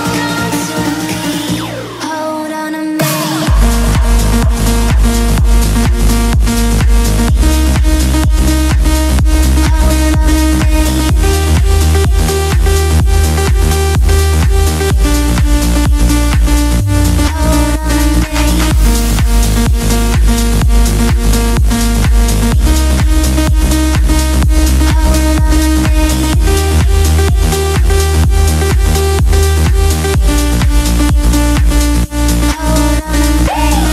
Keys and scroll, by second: 1.7 5, 20.2 Right, 24.3 Left.